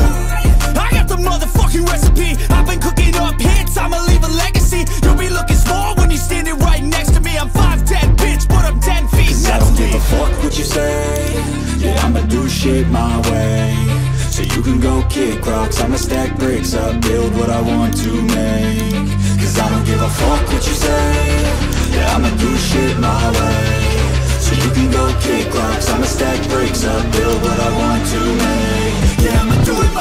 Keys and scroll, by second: 22.8 ctrl+i.